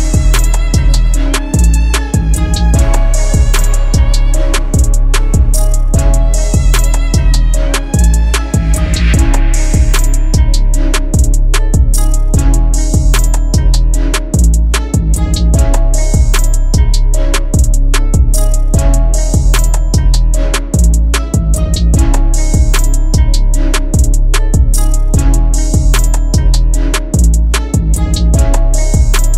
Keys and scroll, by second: 1.5 ctrl+z, 3.2 ctrl+r, 3.6 F3, 7.0 F2, 10.8 Escape, 11.2 F4, 13.3 shift+F2, 19.2 F4, 19.7 Escape, 21.5 e, 22.0 shift+F2, 27.6 F3.